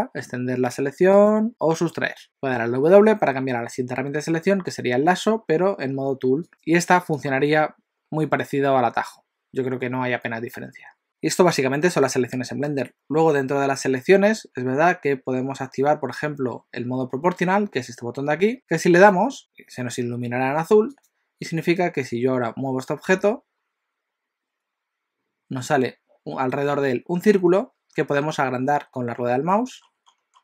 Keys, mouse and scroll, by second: 1.3 click, 2.2 w, 6.5 click, 7.3 click, 19.0 click, 20.9 click, 22.0-22.7 scroll down 2, 23.1 g.